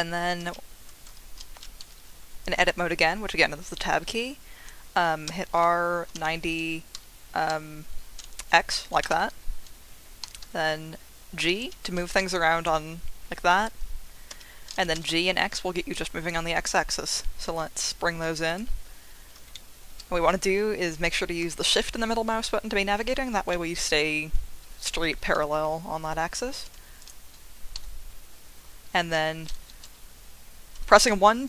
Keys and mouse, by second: 0.4 Escape, 1.1 Tab, 5.2-7.5 typing, 9.0 Return, 10.2 g, 10.4 x, 11.6 Escape, 12.2 g, 14.3 Escape, 14.9 g, 15.1 x, 18.5 click, 19.5 shift+click, 21.6 shift+click, 23.6 shift+click, 26.6 2, 27.0 click, 27.7 g, 29.0 Escape, 29.8 1, 31.1-31.4 typing.